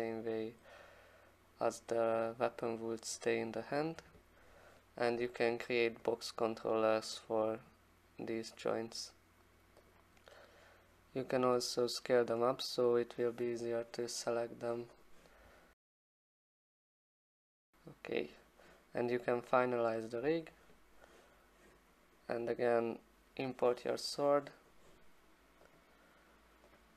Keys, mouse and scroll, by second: 0.6 alt+click, 6.2 click, 7.3 click, 9.9 click, 11.7 click, 12.5 click, 15.0 click, 15.9 click, 16.1 click, 16.7 click, 17.0 click, 17.6 click, 19.7 click, 25.8 click, 26.8 click.